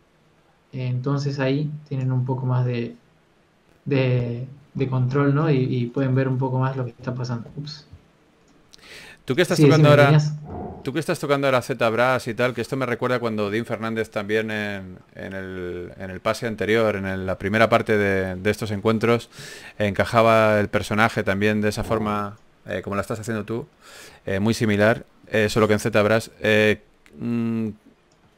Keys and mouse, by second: 8.0 KP_0, 24.7 n, 27.6 click.